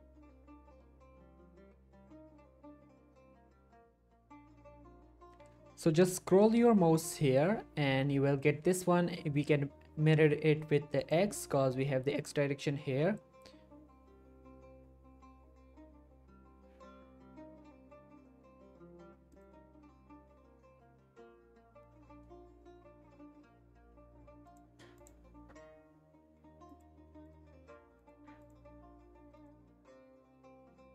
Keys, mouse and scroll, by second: 6.6-7.6 scroll down 1, 7.6-9.1 scroll down 1, 11.3 scroll down 1, 12.6-12.9 scroll up 1, 19.3 click, 20.4-23.6 scroll down 1, 24.5 click, 30.1-30.9 scroll down 1.